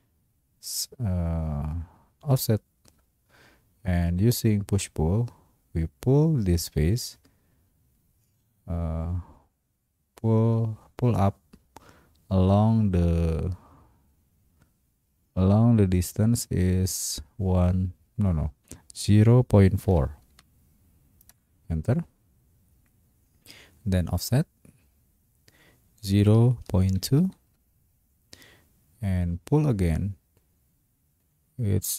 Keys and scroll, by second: 19.2 0, 19.9 ., 20.3 4, 21.3 Return, 26.3 0, 26.9 ., 27.2 2, 27.4 Return.